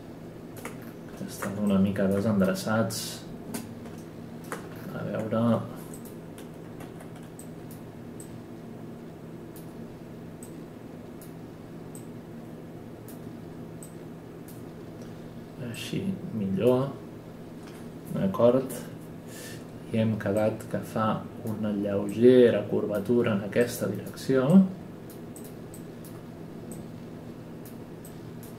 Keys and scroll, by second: 2.4 space, 3.5 space, 6.8 w.